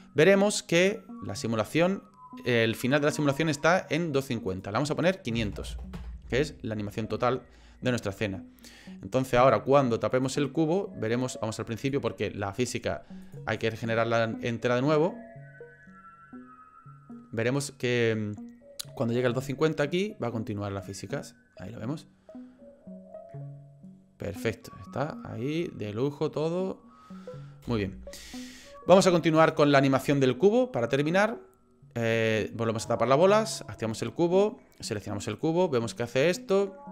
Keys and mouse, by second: 4.6-6.3 drag, 5.7 KP_0, 10.1 click, 11.8 click, 13.3 click, 27.6 space, 29.4 click, 32.3 click, 33.5 click, 34.8 click, 35.4-36.9 drag.